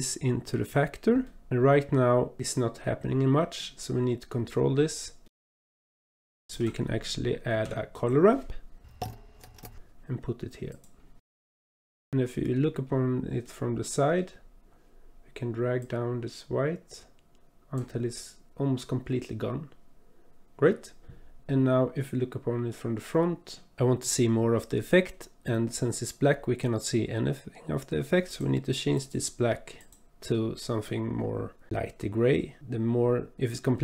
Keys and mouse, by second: 1.2 click, 2.8-5.4 drag, 5.8 click, 7.5 shift+a, 11.2 click, 12.1 click, 13.6-14.2 drag, 15.8-17.8 drag, 22.1-23.6 drag, 28.3 click, 28.9 click, 29.8 click.